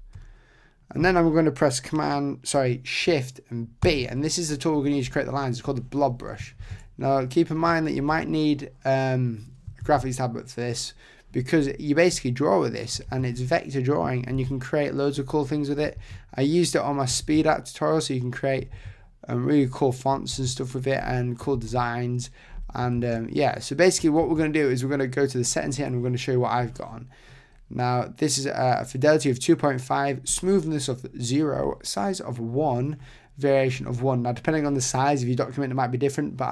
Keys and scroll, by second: 3.8 shift+b, 6.6 super+z, 13.1 super+z.